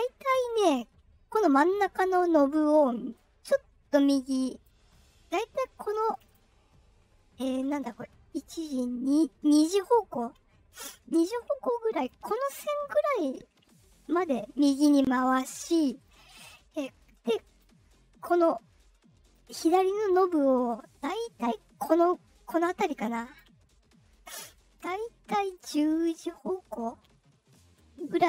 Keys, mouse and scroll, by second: 3.1-4.6 drag, 5.8 click, 6.0 click, 6.2 click, 10.6-12.0 drag, 12.8-15.2 drag, 16.7 click, 19.3-23.3 drag, 24.9-28.2 drag.